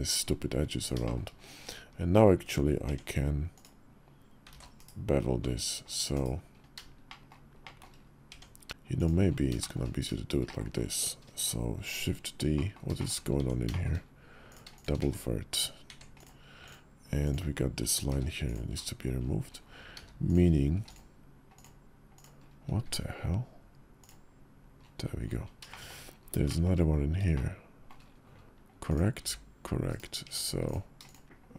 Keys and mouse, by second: 0.8 shift+click, 2.1 Tab, 2.6 Tab, 3.4 click, 4.3 ctrl+z, 4.5 /, 5.9 /, 6.8 shift+middle drag, 7.4 shift+middle drag, 8.1 Tab, 8.5 shift+click, 8.7 click, 9.4 shift+click, 10.2 click, 12.3 click, 12.7 shift+click, 13.2 Tab, 13.5 shift+click, 14.8 1, 15.6 Tab, 15.9 click, 16.4 click, 17.9 q, 19.7 q, 20.5 q, 21.3 click, 21.9 click, 22.6 x, 25.4 shift+middle click, 26.2 shift+click, 27.1 shift+click, 29.0 s, 30.0 Tab, 31.2 1.